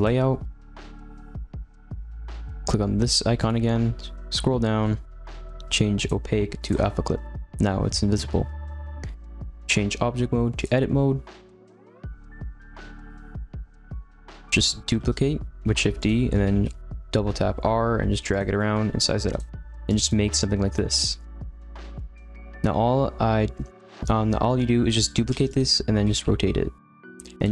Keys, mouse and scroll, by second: 1.2 z, 1.7-3.3 scroll up 2, 5.5-6.7 scroll down 10, 6.7-11.0 drag, 11.0 scroll down 4, 11.2-12.3 middle drag, 12.3 r, 13.6-14.9 middle drag, 14.9 shift+d, 16.3 r, 18.5 middle click, 18.9 s, 19.5 middle click, 19.8 click, 20.1-22.3 middle drag, 22.3 a, 22.5-25.3 middle drag, 25.3 shift+d, 25.9 r, 27.3 g.